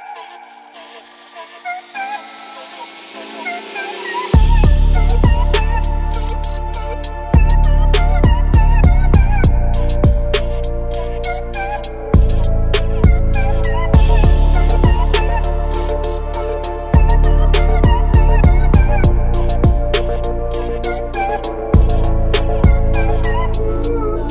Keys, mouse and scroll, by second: 1.5-3.6 drag, 3.1 KP_0, 6.6 click, 8.1 click, 9.9-10.3 drag, 10.9 click, 14.7 click, 16.7 KP_0, 19.8 click, 20.3-20.6 middle drag, 21.8 click, 22.2 click, 22.5 click, 22.9 shift+d, 23.3 x.